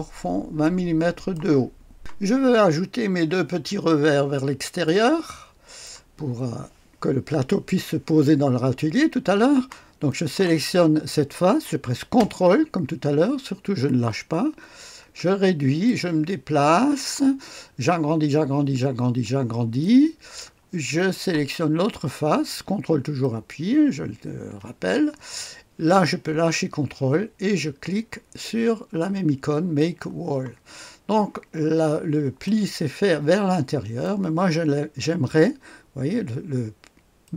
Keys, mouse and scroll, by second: 0.0 click, 0.0 typing, 0.1-1.3 scroll up 1, 1.3-2.3 drag, 2.3-3.3 scroll up 1, 3.3-4.4 scroll up 1, 4.4 right click, 5.2 right click, 10.1 click, 13.2-15.8 ctrl+scroll down 2, 17.9-20.0 scroll up 3, 19.8 ctrl+right click, 20.4 ctrl+right click, 23.2 ctrl+click, 29.8 click, 30.8-32.0 scroll down 2, 32.4 right click, 32.8 click, 33.5-34.7 right drag, 37.2 click.